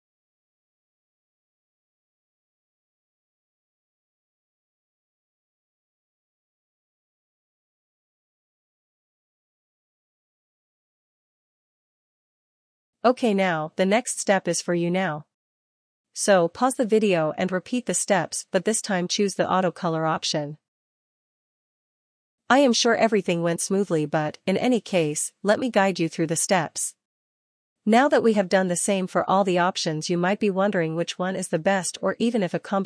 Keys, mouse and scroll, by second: 1.0 click, 5.1 click, 7.1 click, 8.5 click, 13.4 click, 19.9 click, 23.1 ctrl+j, 23.1 click, 24.5 click, 24.7 click, 26.5-32.1 typing, 32.1 Return.